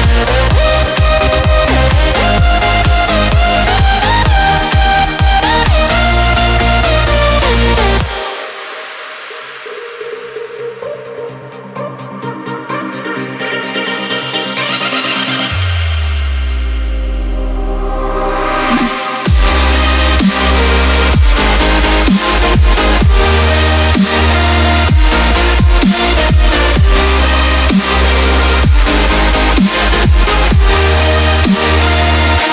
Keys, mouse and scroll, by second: 1.1-6.6 drag, 6.6 v, 7.1 click, 9.6 ctrl+2, 10.4 space, 10.5 click, 10.8 space, 12.5 click, 15.3-17.4 typing, 21.1 click, 22.9 ctrl+a, 24.1-29.5 drag, 31.5 v, 31.9 click.